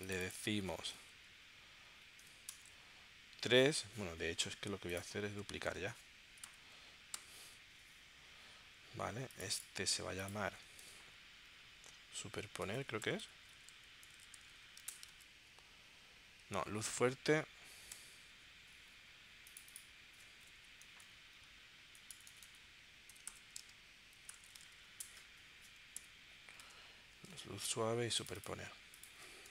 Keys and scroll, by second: 1.1 Left, 1.9 Right, 2.5 BackSpace, 2.7 3, 6.4 super+j, 7.1 super+j, 11.0 BackSpace, 12.2-14.4 typing, 14.8 Return, 15.1 super+Tab, 16.8 super+Tab, 17.9 Return, 20.5 Right, 21.0-25.1 typing, 26.0 Return, 26.6 super+Tab, 27.3 super+Tab.